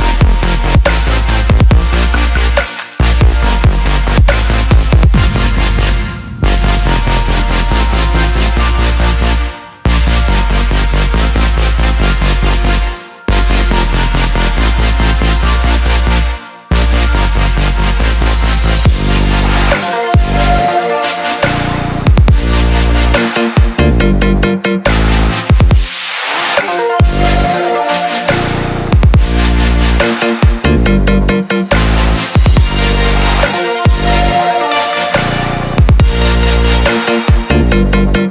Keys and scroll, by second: 13.6 ctrl+j.